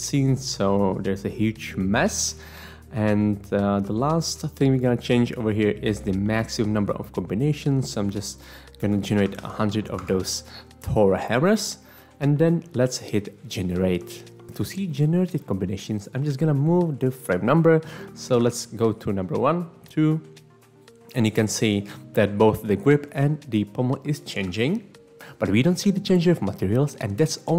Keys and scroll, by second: 8.8-9.2 typing, 10.0 Return, 18.5 Right, 21.5 Right, 22.2 Right, 23.0 Right, 23.5 Right, 24.1 Right, 24.7 Right.